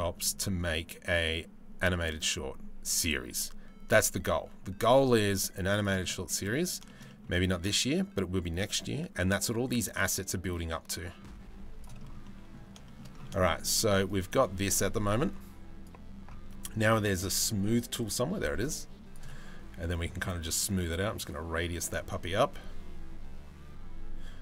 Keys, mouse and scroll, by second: 5.7 middle click, 6.5 shift+middle click, 6.7 middle click, 7.1-11.4 drag, 11.8 middle click, 12.5 shift+middle click, 13.0 shift+middle click, 13.3 middle click, 13.7-15.5 right drag, 17.6 click, 18.3 click, 20.4 click, 21.2-24.4 drag.